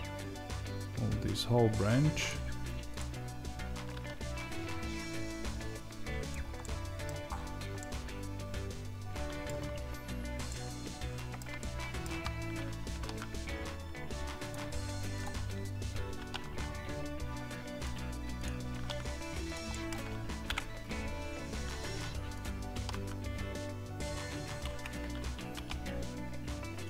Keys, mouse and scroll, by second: 6.2 click, 6.5-22.3 middle drag, 7.2-7.7 scroll up 2, 12.8 r, 20.4 KP_0, 22.3 click.